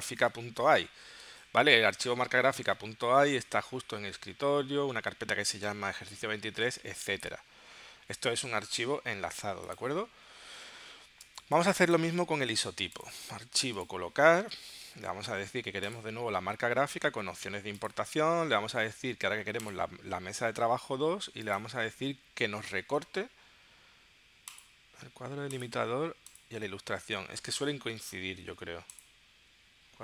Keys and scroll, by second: 11.3 space.